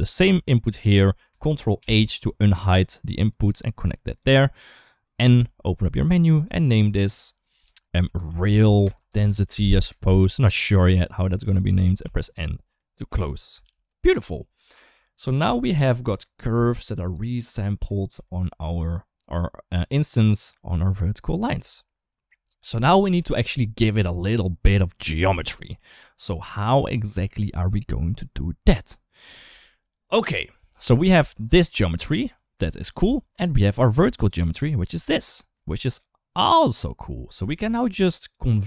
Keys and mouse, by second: 1.6 ctrl+h, 3.1 click, 3.3 click, 5.1 n, 6.4-9.6 drag, 10.8 click, 11.8 n, 12.6 middle click, 13.5 ctrl+s, 14.8 shift+middle drag, 15.6 shift+middle drag, 16.5 shift+middle drag, 17.7 middle drag, 18.0 shift+middle drag, 18.4 middle drag, 21.4 ctrl+s, 30.5 middle click, 31.2 ctrl+shift+click, 32.8 ctrl+z, 33.2 middle click, 34.0 ctrl+shift+click, 34.9 ctrl+z, 35.5 middle click, 36.7 click, 37.6 shift+middle click, 38.0 click.